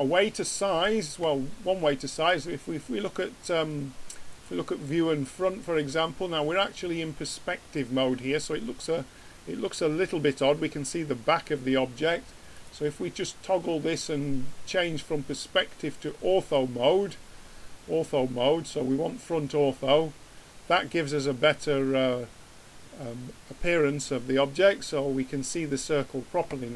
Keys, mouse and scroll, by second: 2.1-4.0 drag, 12.5-14.5 drag, 19.9 middle click, 20.2 middle click.